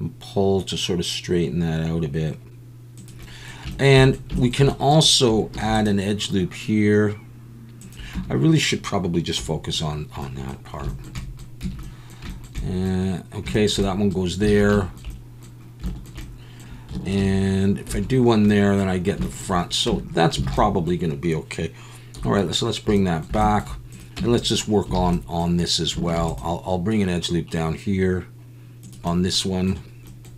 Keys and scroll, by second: 5.5 ctrl+r, 8.1 Tab, 9.4 /, 11.6 Tab, 14.5 alt+a, 17.2 ctrl+r, 19.9 Tab, 20.4 alt+a, 22.2 /, 24.2 Tab, 25.0 alt+a, 26.2 ctrl+r.